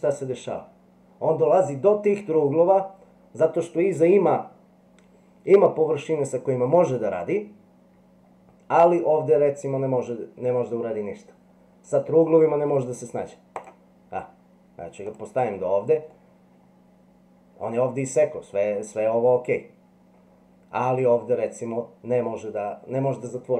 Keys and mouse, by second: 16.1-18.8 middle drag.